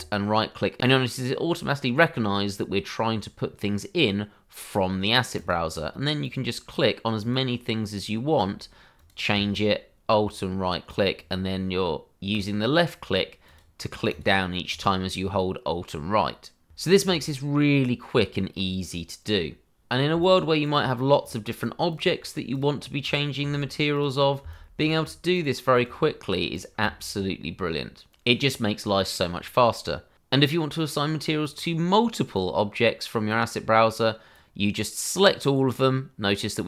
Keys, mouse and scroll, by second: 5.3 click, 6.2 click, 7.2 click, 8.9 click, 9.5 alt+right click, 13.4 right click, 14.7 click, 19.8 click, 20.1 alt+right click, 23.3 click, 23.8 alt+right click, 25.5 click, 26.0 alt+right click, 30.1 click, 30.8-31.4 scroll down 1, 31.4 click.